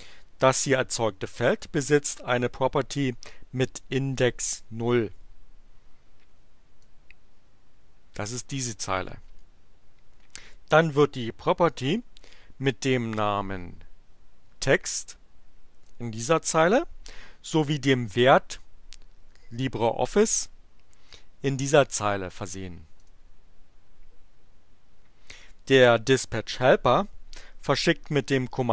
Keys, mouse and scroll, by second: 6.7-8.5 drag, 14.7-16.0 drag, 21.1-22.7 drag, 22.9 click.